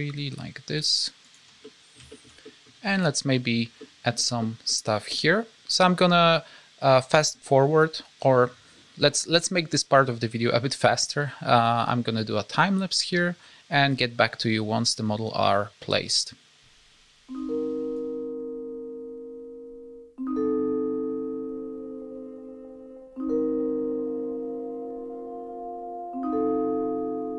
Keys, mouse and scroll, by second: 1.6 middle click, 2.1 shift+middle click, 2.4 middle click, 2.7-3.0 scroll up 2, 3.8 middle click, 4.4 shift+middle click, 4.8 middle click, 11.1-11.5 scroll down 1.